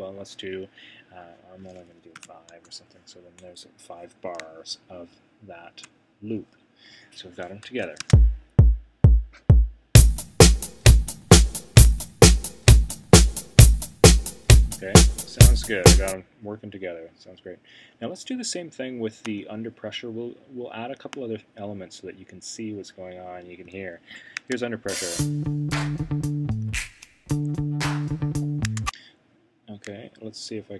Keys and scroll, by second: 2.1 5, 2.5 Return, 7.7 Return.